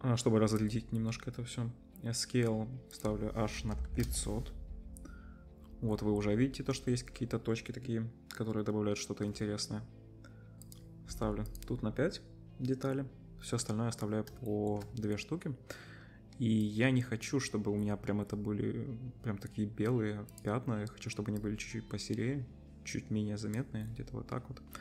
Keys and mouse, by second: 3.8 0, 5.9-11.6 middle drag, 14.2-16.6 shift+drag, 16.6-18.0 middle drag, 18.1-20.3 middle drag, 20.3-24.8 drag.